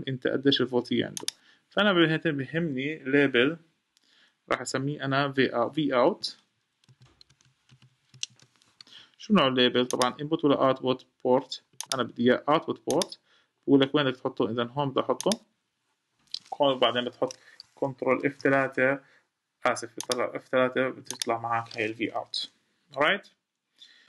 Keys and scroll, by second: 18.0 F3.